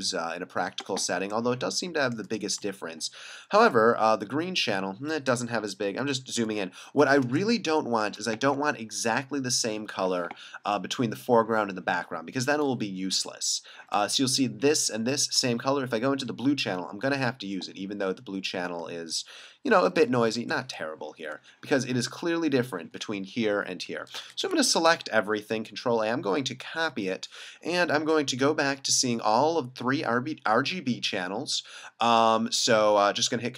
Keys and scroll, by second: 3.6 super+4, 5.3 super+3, 6.0 super+4, 6.4 super+3, 7.4 space, 9.9 v, 13.1 super+4, 15.7 super+5, 19.9 super+4, 20.4 super+5, 24.4 super+0, 24.8 super+a, 26.9 super+c.